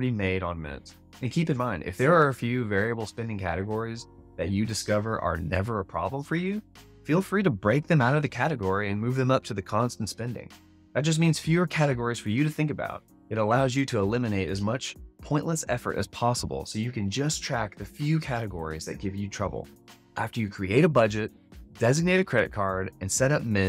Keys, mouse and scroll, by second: 1.1 alt+a.